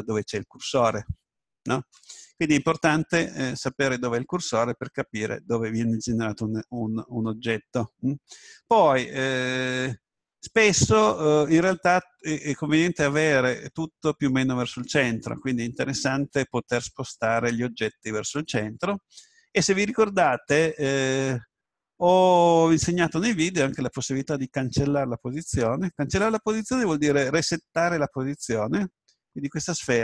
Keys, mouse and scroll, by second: 21.0-22.3 drag.